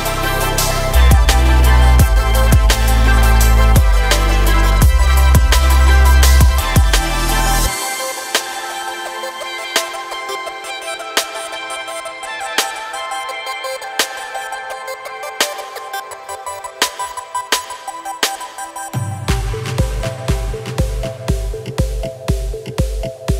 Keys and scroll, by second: 11.8 g, 12.1 y, 17.4 g.